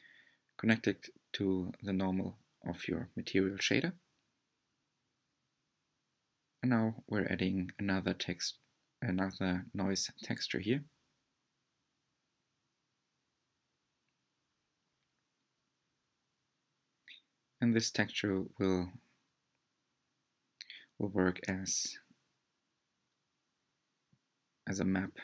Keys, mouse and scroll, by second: 0.6 scroll down 4, 1.2-4.8 shift+middle drag, 5.0-10.0 middle drag, 10.0 ctrl+shift+click, 13.6-15.7 drag, 15.7-16.6 scroll down 3, 16.6-17.4 scroll up 2, 18.0 z, 22.8 click, 24.7 ctrl+shift+click.